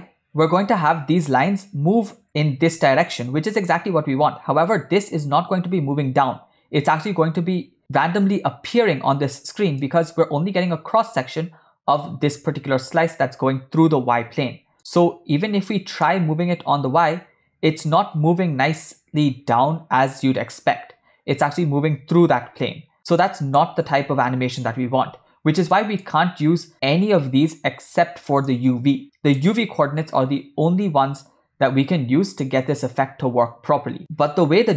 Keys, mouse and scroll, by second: 9.9 shift+middle click, 14.9 middle click, 16.1-23.6 shift+drag, 25.8 middle click, 28.6-29.7 drag.